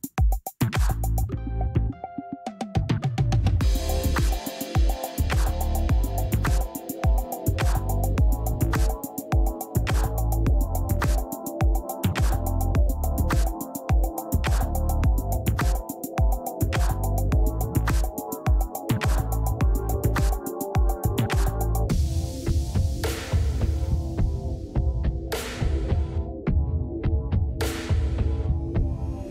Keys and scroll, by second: 17.7 space, 27.8 space.